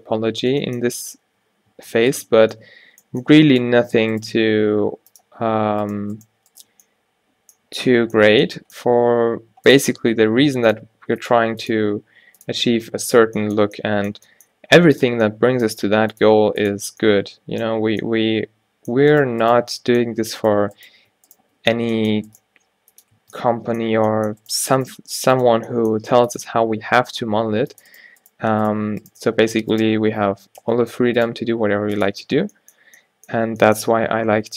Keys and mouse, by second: 0.4 Tab, 1.3 z, 1.8 Tab, 4.3 g, 5.2 click, 10.3 e, 11.0 r, 11.4 g, 13.2 z, 14.6 g, 15.8 r, 16.3 g, 20.0-21.7 drag, 21.7 f, 22.5 g, 23.3 Tab, 24.0 Tab, 26.0 g, 27.2 ctrl+r, 29.4 g, 30.7 f, 31.0 Tab, 32.3 q, 33.5 Tab, 34.0 a.